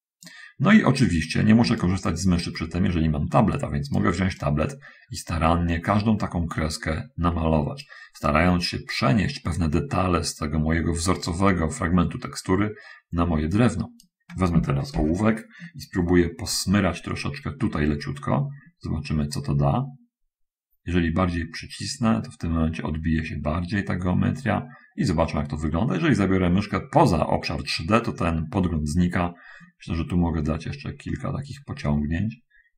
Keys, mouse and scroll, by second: 2.1-4.4 shift+right drag, 4.6-8.3 right drag, 8.6-14.5 right drag, 19.5-24.5 drag, 30.0 click, 30.8 click, 32.4 click.